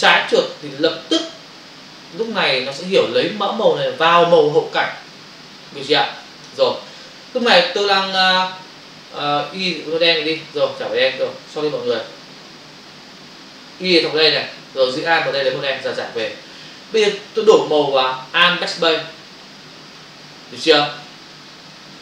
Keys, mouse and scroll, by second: 0.6 alt+click, 10.3 click, 14.2 click, 15.2 alt+click, 16.2 v, 18.8 alt+BackSpace.